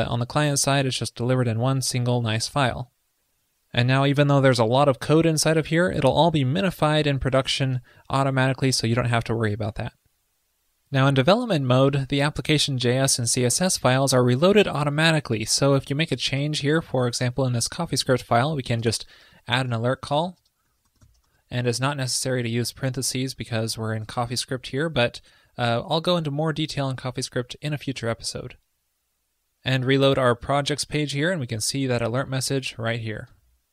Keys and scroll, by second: 24.1 super+s, 30.2 super+r.